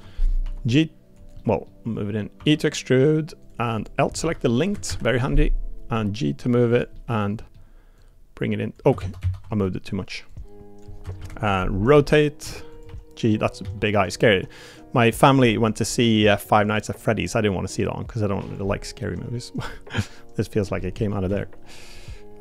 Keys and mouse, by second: 0.4 g, 1.4 middle click, 2.4 e, 3.7 click, 4.2 l, 5.9 g, 6.9 middle click, 8.0 click, 9.0 ctrl+z, 9.2 ctrl+z, 9.6 middle click, 10.3 click, 11.9 r, 12.8 g, 13.6 s, 14.3 g, 15.4 middle click, 16.1 middle click, 16.8 middle click, 17.5-18.5 drag, 18.6 middle click, 19.8 click, 20.8 middle click, 21.3 s.